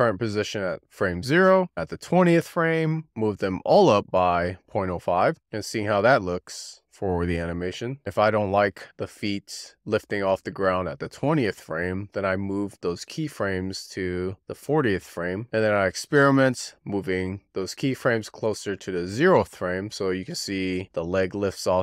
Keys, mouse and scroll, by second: 1.6 Left, 1.6 click, 3.5 click, 5.8-6.5 drag, 10.1-11.3 drag, 11.9 click, 12.4 g, 12.9-13.4 drag, 14.3-14.7 scroll up 6, 14.7-15.1 scroll down 1, 15.4 click, 15.6 g, 16.6-18.0 drag, 18.7 click.